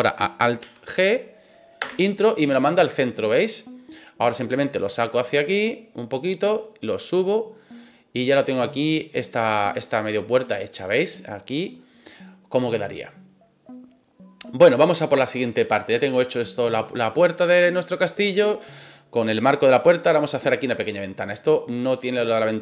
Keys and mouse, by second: 0.6 alt+g, 1.8 Return, 2.1 middle click, 2.9-3.5 middle drag, 4.2-6.1 drag, 6.6 click, 7.7-8.7 middle drag, 9.1 right click, 9.6-13.0 middle drag, 15.7-16.3 middle drag, 17.1-17.5 middle drag, 17.7 shift+middle drag, 20.7 click.